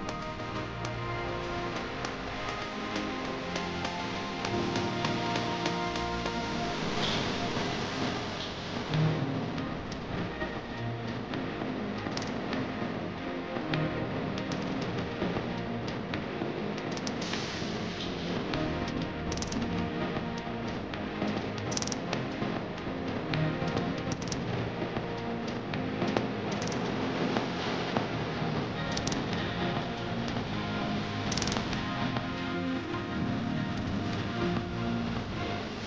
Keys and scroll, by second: 9.6 shift+F2, 11.9 KP_Add, 18.5 F3, 19.2 Escape, 26.1 shift+F2, 26.9 F3, 29.9 shift+F2, 30.4 Escape.